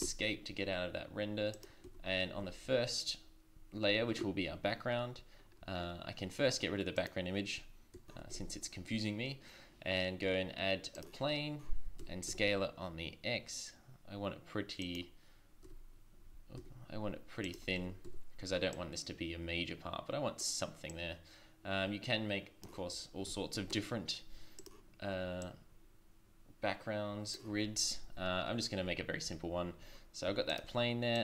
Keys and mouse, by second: 0.0 Escape, 1.5 click, 1.8 z, 2.4 z, 8.2 shift+a, 12.0 s, 17.8 Tab, 18.0 Tab, 23.2 s, 25.4-27.1 drag.